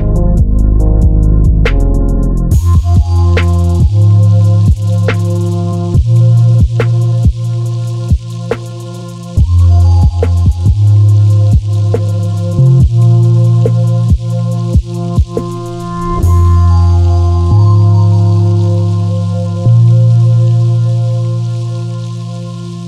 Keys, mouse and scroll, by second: 0.5 s, 1.8-2.9 middle drag, 2.9 click, 3.3 g, 5.3 click, 6.0-8.3 middle drag, 7.5 scroll up 1, 8.3 click, 8.6 Tab, 9.1 3, 9.3 click, 10.0 e, 11.0 click, 11.4 e, 12.7 e, 12.8 KP_Enter, 13.0 ctrl+z, 13.6 e, 14.8 e, 14.9 Escape, 15.1 e, 16.5 click, 16.7 Tab, 17.1 click, 17.3 scroll down 1, 17.7-21.7 middle drag, 18.4-18.8 scroll down 2, 19.3-19.6 scroll down 2, 20.4 KP_1, 20.9 shift+z, 21.2-21.7 scroll up 2, 21.7 click, 22.0-22.5 scroll down 2, 22.5-22.8 shift+middle drag.